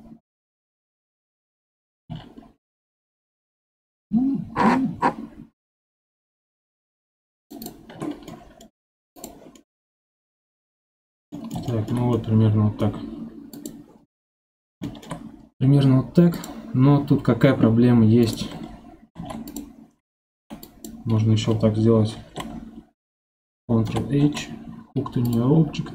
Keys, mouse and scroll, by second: 7.6-9.2 shift+drag, 9.5-11.0 middle drag, 11.0 scroll down 6, 11.3-13.5 middle drag, 13.5 click, 14.1-14.6 scroll up 4, 14.6 scroll down 2, 14.8-15.2 shift+middle drag, 15.2 scroll up 1, 16.3 click, 16.9 scroll down 4, 18.2 click, 19.2 ctrl+Tab, 20.3 1, 20.6 click, 23.9 ctrl+h.